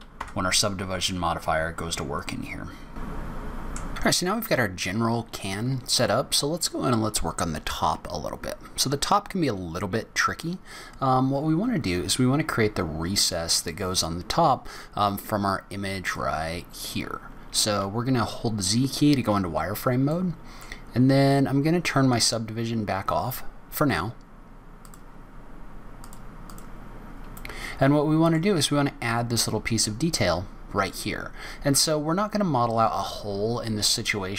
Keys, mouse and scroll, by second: 0.2 Tab, 1.0 middle click, 3.1-3.6 scroll down 9, 3.2 middle click, 3.4 middle click, 3.6 scroll up 6, 26.4 click, 26.9 scroll up 2, 27.3 middle click, 31.0-31.5 scroll down 2, 31.5-32.5 scroll up 3.